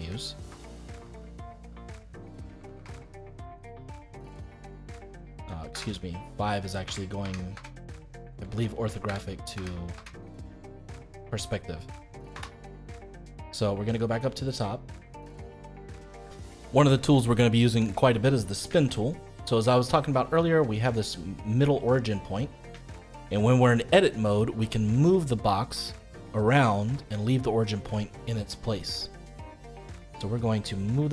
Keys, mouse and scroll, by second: 0.0-2.9 typing, 3.9-5.7 middle drag, 5.7 KP_5, 6.2 middle click, 6.8 KP_5, 7.1 KP_5, 7.5 KP_5, 8.0-9.0 middle drag, 9.0 KP_5, 9.5 KP_5, 9.9 KP_5, 10.3-12.3 middle drag, 12.3 KP_7, 12.9-14.2 scroll up 2, 14.2-15.5 shift+middle drag, 18.8-21.8 shift+middle drag, 22.8-25.2 shift+middle drag, 25.2 click.